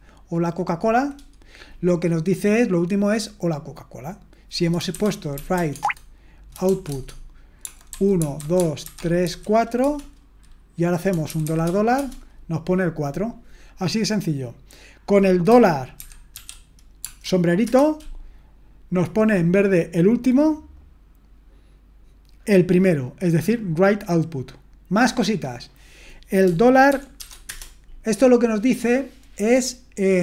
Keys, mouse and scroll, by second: 4.7-9.8 typing, 11.3 typing, 11.9 Return, 16.0 typing, 17.6 Return, 26.9-27.2 typing, 27.4 Return.